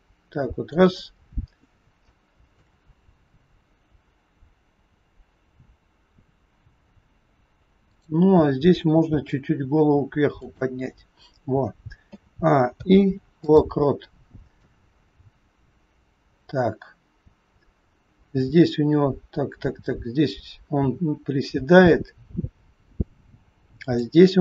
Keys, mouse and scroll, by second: 1.1-2.0 scroll up 2, 2.0 shift+middle click, 5.9-7.9 scroll up 2, 7.9 click, 9.1 r, 10.9 scroll down 2, 12.0-12.6 scroll down 1, 12.0 a, 12.6 i, 14.6 click.